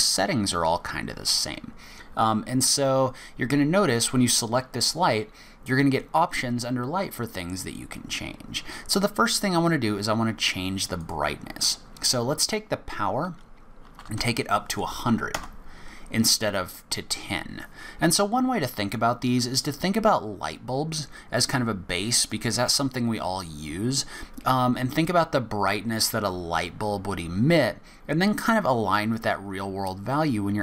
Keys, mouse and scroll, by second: 11.0 click, 14.1 KP_0.